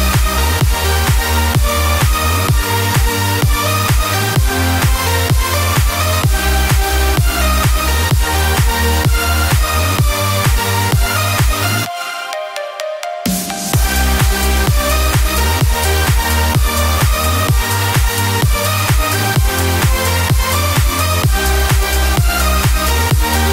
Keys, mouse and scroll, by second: 2.3 3, 9.4-10.6 drag, 9.4 1, 14.3-16.7 drag.